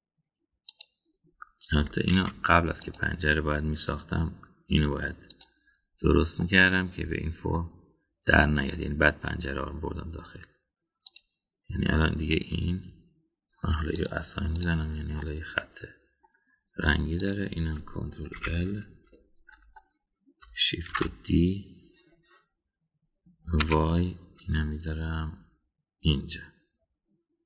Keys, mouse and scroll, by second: 3.1 ctrl+r, 7.4-8.5 middle drag, 12.1 click, 13.3 click, 14.9 drag, 15.6 drag, 16.2-17.3 middle drag, 18.2 click, 19.4 ctrl+l, 21.9 shift+d.